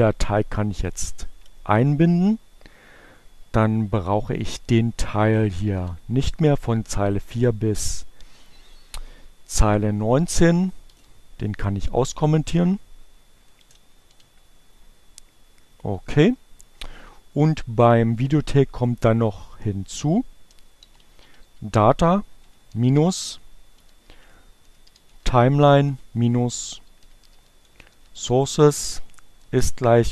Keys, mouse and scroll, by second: 2.7 click, 3.7 click, 6.8 click, 9.3 shift+7, 14.8 click, 15.4 shift+7, 17.6 click, 22.1 click, 22.8-24.8 typing, 26.0-30.1 typing.